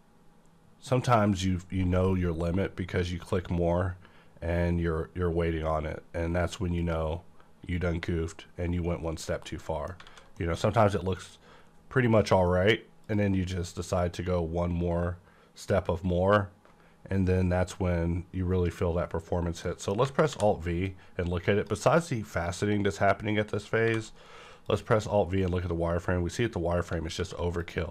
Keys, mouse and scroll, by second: 6.8 click, 6.8-7.9 scroll down 1, 9.1 scroll down 1, 9.5 middle click, 10.0 a, 10.4 middle click, 10.6 scroll up 1, 11.1 click, 12.9 click, 19.6 middle click, 19.6 click, 20.3 alt+v, 20.7-24.6 drag, 23.8 alt+v, 25.3 scroll up 1, 26.5-27.2 scroll down 1, 27.2 v, 27.5 click.